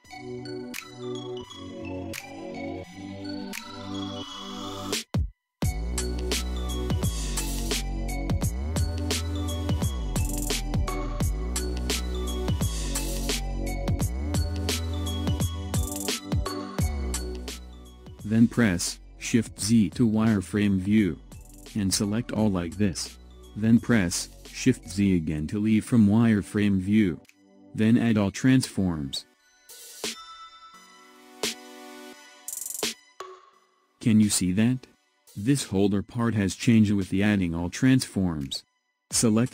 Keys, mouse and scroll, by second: 2.6 scroll up 2, 3.1-3.7 scroll down 8, 4.3-5.3 alt+shift+right drag, 5.3-7.2 shift+middle drag, 7.2 KP_1, 8.0 scroll down 4, 8.6 click, 10.1-12.1 drag, 12.1-12.7 scroll up 2, 12.7-14.3 shift+middle drag, 14.3 click, 15.6 click, 19.6 shift+z, 22.5 click, 26.0 shift+z, 28.2 ctrl+a, 29.7 click, 30.4 click, 31.3 scroll up 2, 32.3-33.8 shift+middle drag, 33.8 click, 34.9 scroll up 2, 35.5-38.5 shift+middle drag, 39.1 click.